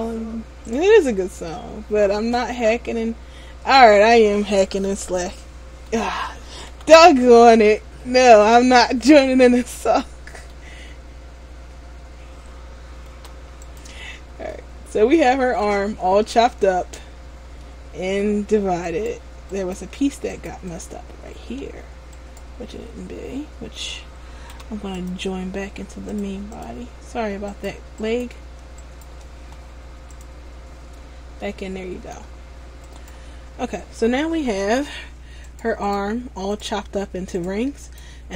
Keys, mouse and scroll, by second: 0.9 right click, 1.3-1.6 scroll down 1, 1.6 middle click, 6.9 c, 8.7 right click, 8.9 middle click, 11.7-12.0 scroll up 2, 13.3 p, 14.7 middle click, 16.2 Tab, 16.9 scroll down 1, 17.8 middle click, 17.8 scroll down 2, 19.0 right click, 19.7 right click, 20.5 right click, 21.4 Tab, 22.3 right click, 24.7 p, 26.3 click, 27.6 right click, 28.9 right click, 29.2 shift+right click, 30.3 click, 31.6 middle click, 33.0 right click, 34.4 scroll up 1, 35.0 scroll up 2, 35.6 right click, 38.0-38.3 right click.